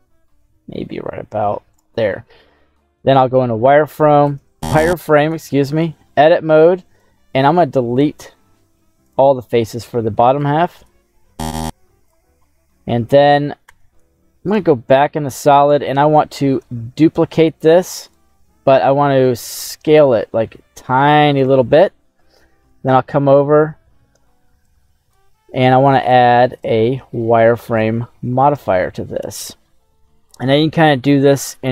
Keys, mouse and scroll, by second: 1.7 click, 3.3 z, 4.3 Tab, 5.2 right click, 5.8-7.1 drag, 8.0 x, 10.4 click, 11.4 x, 12.4 middle click, 13.6 Tab, 14.5 z, 15.1 middle click, 15.6 right click, 16.5 shift+d, 18.0 right click, 18.7 s, 21.4 click, 24.6 click, 26.5-28.0 drag, 28.8 middle click, 29.9 scroll up 1, 30.5 scroll down 1.